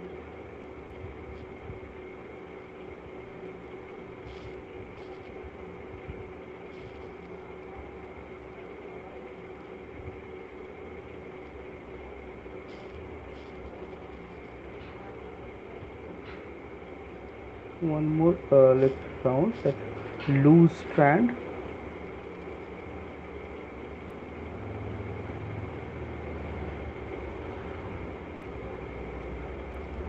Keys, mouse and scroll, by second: 0.6 shift+click, 2.1 click, 6.9 click, 9.8 middle click, 10.5 click, 13.8 middle click, 13.8 click, 15.8 middle click, 18.5 shift+click, 21.0 alt+click, 22.5 click, 22.8 click, 26.9 click.